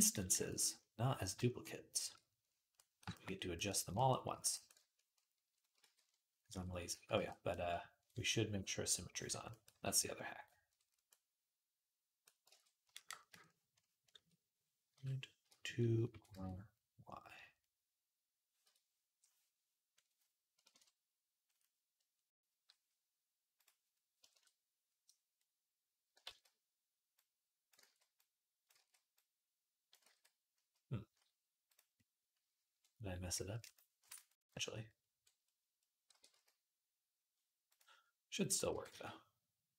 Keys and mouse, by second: 1.5-8.8 shift+drag, 4.1 d, 5.6 ctrl+z, 6.7 ctrl+z, 7.0 ctrl+z, 8.8-10.0 middle drag, 9.5 d, 10.0-13.3 ctrl+drag, 12.3 ctrl+Tab, 13.3 middle click, 13.5 click, 13.6 middle click, 13.8 click, 13.9-19.8 middle drag, 15.9 r, 19.8-31.5 drag, 26.1 ctrl+z, 27.6 ctrl+z, 28.6 ctrl+z, 29.8 ctrl+z, 31.5-39.7 middle drag, 35.9 r, 38.2 click, 38.5 r.